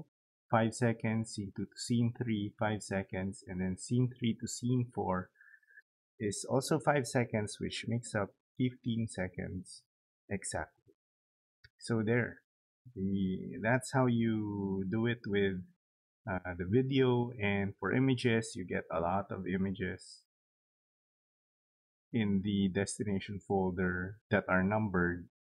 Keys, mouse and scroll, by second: 13.2 right click.